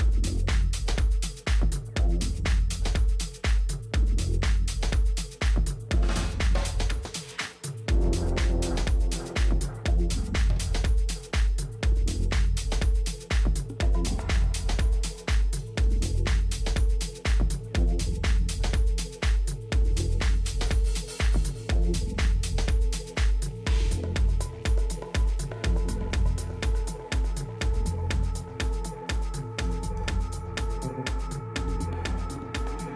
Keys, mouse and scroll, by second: 27.1-30.2 middle drag, 28.7 KP_3, 30.2 z, 32.2-32.9 middle drag.